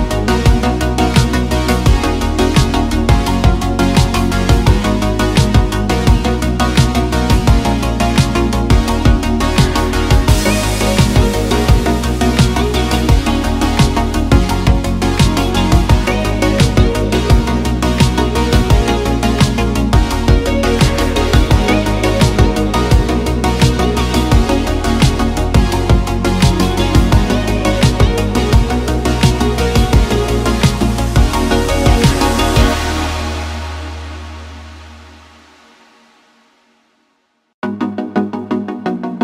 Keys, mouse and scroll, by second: 0.3 middle click, 1.3 click, 1.4 middle click, 1.9 click, 2.3 super+z, 2.5 Tab, 3.4 click, 4.2 middle click, 4.8 click, 5.7 Tab, 7.2 click, 7.5 click, 8.2 click, 9.4 click, 10.6 e, 11.4 click, 12.4 shift+click, 13.0 shift+click, 14.8 shift+click, 16.1 shift+click, 16.5 click, 17.1 click, 18.1 click, 19.5 click, 20.2 click, 21.1 click, 21.8 e, 24.4 click, 25.0 click, 25.9 click, 26.7 shift+click, 27.2 shift+click, 27.3 shift+click, 27.8 shift+click, 28.9 middle click, 29.5 e, 30.4 click, 31.7 middle click, 33.0 click, 34.6 middle click, 34.9 shift+middle click, 35.6 shift+middle click, 36.1 shift+middle click, 36.7 click, 37.1 middle click, 37.3 click, 39.1 shift+click.